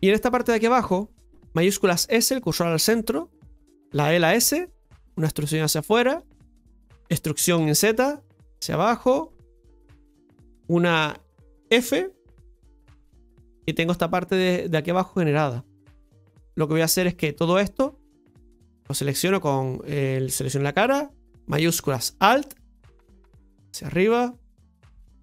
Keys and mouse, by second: 1.0 right click, 9.5-12.0 middle drag, 12.7 f, 13.3-15.0 middle drag, 15.1 shift+middle click, 17.0-18.3 right drag, 18.3-19.5 drag, 19.5-21.9 right drag, 22.2 alt+shift+right click, 22.4 alt+shift+right click, 23.6-24.9 drag.